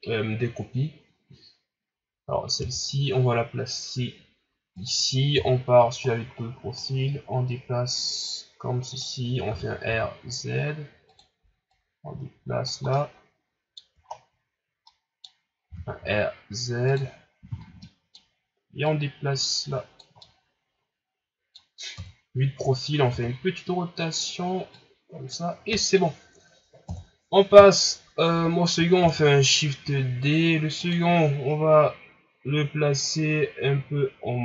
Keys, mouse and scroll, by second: 2.6 g, 5.3 KP_3, 6.0-6.7 scroll up 1, 6.7-9.5 drag, 9.5 r, 11.7-12.9 drag, 12.9-14.0 middle drag, 14.0 ctrl+scroll up 1, 14.8 middle click, 15.6 r, 17.8-18.8 middle drag, 18.8-20.2 drag, 20.2-21.9 middle drag, 21.9 KP_3, 23.1 r, 24.7 click, 25.5 scroll down 2, 26.9 KP_1, 29.0 shift+d.